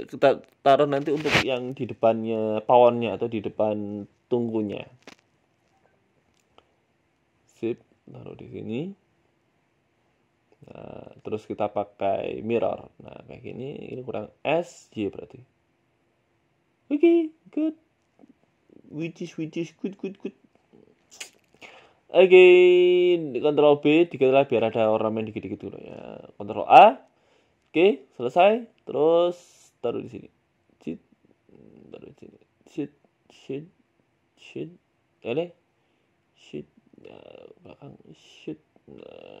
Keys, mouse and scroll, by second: 0.1 s, 1.4 s, 4.2 s, 5.5 KP_1, 5.9 s, 7.2 Tab, 7.7 g, 11.3 click, 12.8 click, 13.2 middle click, 13.5 Tab, 14.1 middle click, 14.6 middle click, 15.9 s, 17.4 middle click, 18.0 middle click, 18.1 Tab, 18.3 middle click, 18.8 right click, 19.9 right click, 20.1 ctrl+b, 21.0 Tab, 21.2-21.6 scroll down 3, 21.4 middle click, 22.1 middle click, 22.5 Tab, 22.7 scroll down 1, 23.1 right click, 23.9 ctrl+b, 24.6 Tab, 24.8 middle click, 25.1-25.9 scroll down 1, 26.2 click, 26.2 scroll down 3, 26.4 ctrl+a, 26.9 click, 28.2 ctrl+j, 28.8 KP_1, 29.5 g, 30.3 s, 30.8 scroll up 6, 31.0 shift+middle click, 31.2 scroll down 1, 31.2 scroll up 2, 31.4 shift+middle click, 32.3 s, 33.1 g, 34.2 s, 35.1 ctrl+z, 35.1 g, 35.5 s, 36.3 g, 37.1 middle click, 37.4 scroll down 2, 37.8 g, 39.3 middle click.